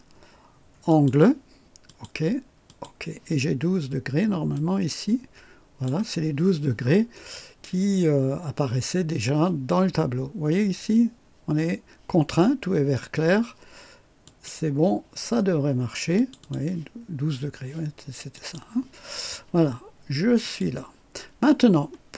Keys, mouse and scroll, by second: 0.9 click, 1.9 click, 2.7 click, 4.5-6.1 drag, 14.2 click, 16.2 click, 18.4 click, 20.4 click.